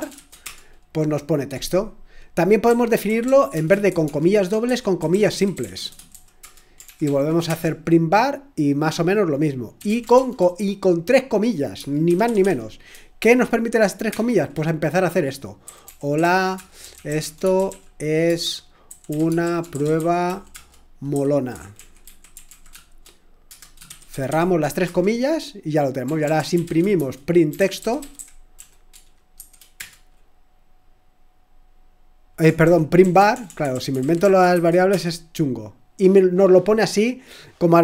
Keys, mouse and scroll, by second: 0.0-7.5 typing, 9.6-24.8 typing, 25.9-29.7 typing, 32.4-35.4 typing, 36.7-37.8 typing.